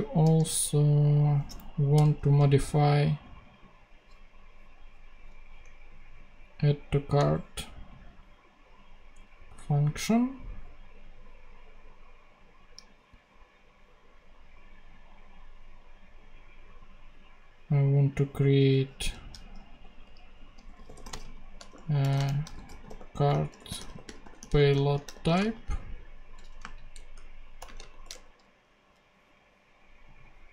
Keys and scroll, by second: 0.1 d, 1.5 Down, 1.8 Return, 18.4 Return, 18.9 shift+Return, 19.9 shift+Up, 20.4-27.8 typing, 28.0 shift+Return.